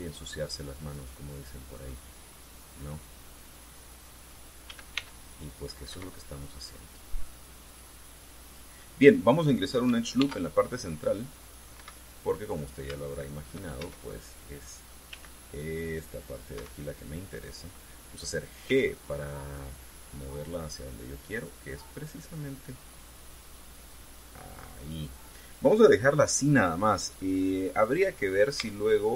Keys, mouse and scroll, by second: 1.6 click, 2.5-4.4 drag, 5.4 a, 5.7 c, 6.0 click, 6.7 Escape, 6.9-9.5 drag, 10.9 ctrl+r, 12.2 click, 12.5 Escape, 13.4 scroll up 3, 13.8 shift+click, 14.5 shift+a, 15.8 c, 16.7 click, 17.3 Escape, 19.4 g, 25.6 click, 26.4-26.8 scroll down 2, 27.6-28.0 scroll up 2, 28.2-28.6 scroll down 2.